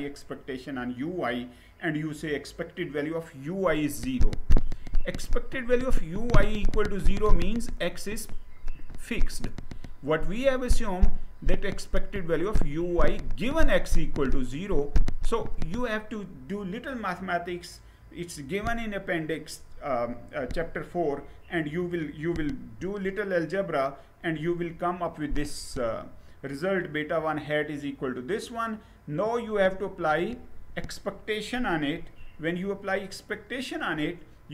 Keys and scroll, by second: 22.3 Down, 31.5 Right.